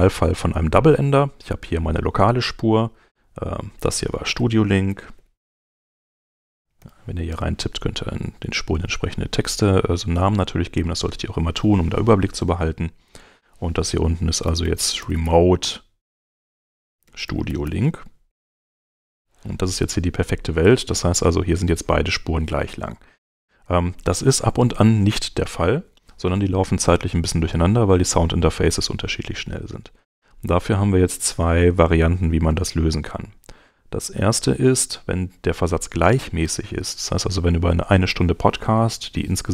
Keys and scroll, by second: 4.7-7.3 typing, 14.2-19.6 typing.